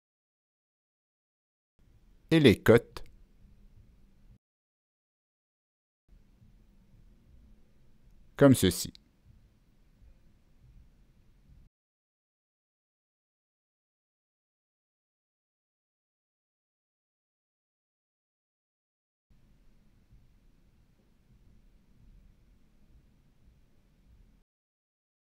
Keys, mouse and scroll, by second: 0.7 click, 1.7 ctrl+click, 2.9 ctrl+click, 3.6 right drag, 5.0 ctrl+click, 5.0 right click, 5.2 right click, 6.1 click, 6.9 click, 6.9 right click, 7.6 click, 8.8 Down, 9.3 Return, 9.3 Down, 9.3 click, 10.0 Return, 10.3 Down, 10.3 click, 11.4 Return, 11.4 Down, 11.4 click, 11.9-13.4 scroll up 3, 13.0 Return, 13.0 click, 13.5-14.2 scroll down 2, 15.3 click, 16.5 click, 17.2 click, 19.6 Down, 19.9 Return, 20.4 Down, 20.4 Return, 20.4 click, 21.5 Down, 21.5 Return, 23.3 click, 23.4 Down, 23.4 Return, 24.1 click, 25.2 click.